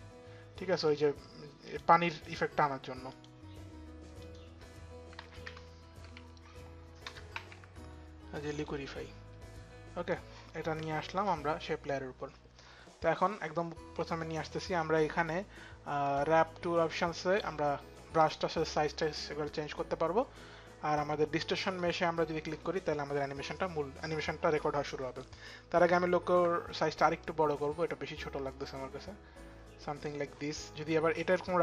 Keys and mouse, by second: 1.2 click, 1.8 click, 2.7 click, 4.6-8.6 typing, 4.8 click, 5.8 click, 6.6 click, 8.1 click, 10.1 click, 10.1 BackSpace, 10.1 q, 12.1 click, 12.9 click, 15.6 click, 21.4 click, 25.4 click, 26.8 click.